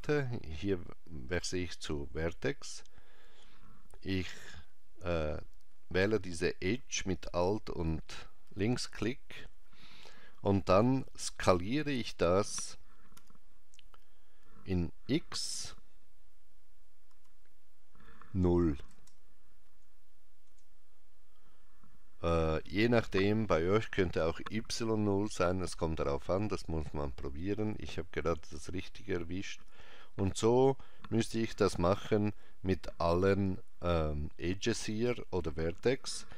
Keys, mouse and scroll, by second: 7.2 alt+click, 13.2 s, 31.9 alt+click.